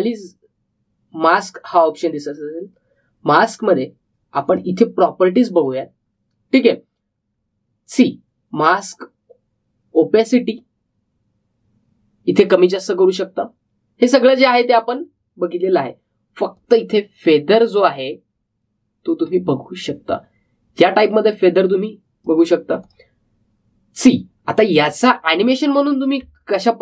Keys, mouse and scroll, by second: 5.4 click, 11.3-17.5 drag, 17.5-25.9 drag.